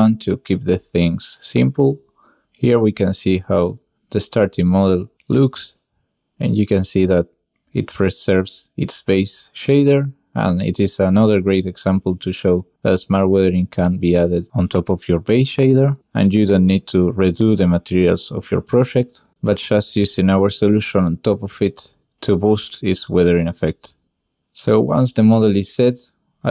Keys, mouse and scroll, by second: 1.2 click, 1.4 ctrl+click, 1.9 ctrl+j, 2.4-6.2 drag, 6.3 shift+click, 6.5 drag, 7.0 drag, 7.2 middle click, 7.4 middle drag, 7.7 shift+middle drag, 7.8-8.1 middle drag, 8.8 middle click, 10.6 middle click, 11.9 n, 12.2 middle click, 12.5 middle click, 12.7 ctrl+shift+click, 13.4 click, 13.7 click, 14.0 ctrl+shift+click, 15.0-15.9 ctrl+shift+drag, 16.6 click, 16.8 ctrl+shift+click, 17.4 ctrl+shift+click, 17.5 click, 17.6 ctrl+shift+click, 17.8 click, 18.3 ctrl+shift+click, 18.7 click, 19.0 ctrl+shift+click, 19.9 click, 20.2 ctrl+click, 21.2 ctrl+click, 21.3 click, 23.5 n, 25.6 click.